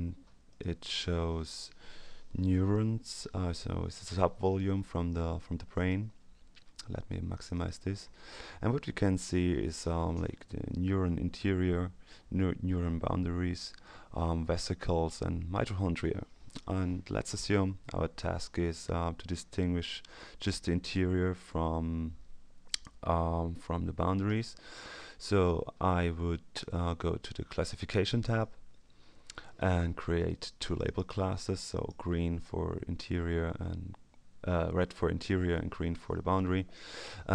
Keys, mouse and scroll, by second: 0.4 click, 7.3 click, 8.3-9.5 ctrl+scroll up 2, 28.2 click, 30.6 click, 31.7 click.